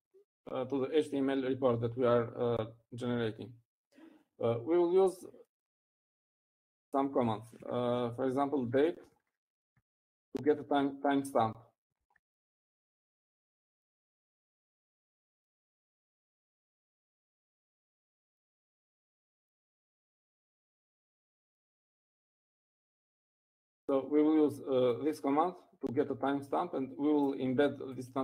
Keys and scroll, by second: 9.5 typing, 11.5-12.2 typing, 12.7 shift+Left.